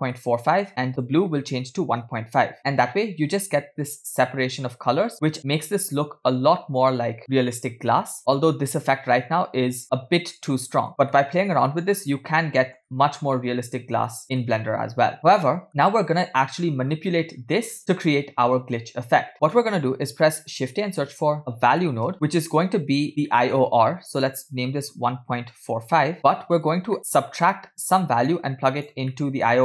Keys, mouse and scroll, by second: 0.2 middle click, 1.0-2.6 drag, 3.0-3.7 scroll up 2, 5.4 middle click, 6.0-6.6 scroll down 2, 6.6 middle click, 9.8-10.9 middle drag, 11.1-11.7 middle drag, 12.0-12.8 middle drag, 13.4-14.5 middle drag, 15.2 middle click, 16.6 scroll down 2, 17.2 scroll down 2, 17.2 middle click, 19.4 middle click, 20.4 shift+a, 22.3-23.0 scroll up 1, 23.0 scroll up 1, 23.3 middle click, 23.6-24.2 scroll up 2, 24.2-26.2 drag, 26.7-27.0 scroll down 2, 27.0 middle click, 28.0-28.7 drag, 29.1 middle click.